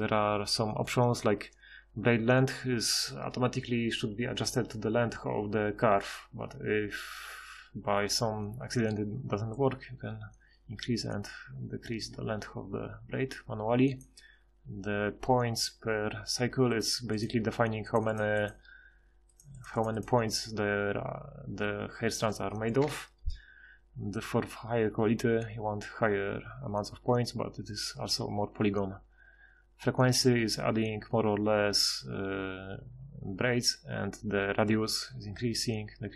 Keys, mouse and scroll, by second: 18.2-19.4 drag, 22.8 F6.